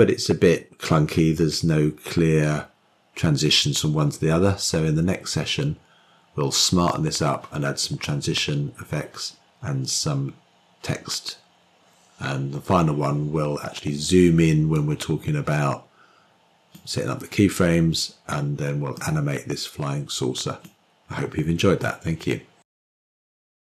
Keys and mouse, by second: 15.5-17.5 drag, 19.8-21.4 drag.